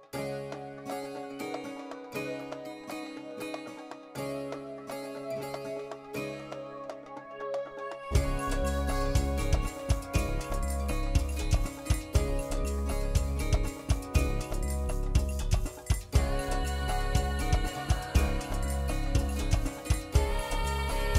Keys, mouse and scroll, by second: 0.0 shift+click, 0.3 shift+click, 0.7 shift+click, 0.9 shift+click, 1.2 shift+click, 1.3 middle click, 2.9 scroll down 4, 3.8 Tab, 4.0 middle click, 4.7 g, 6.4 g, 7.9 middle click, 8.3 shift+middle click, 9.4 click, 11.9 Tab, 12.9 KP_7, 14.2 e, 18.0 right click, 18.7 ctrl+z, 19.7 click.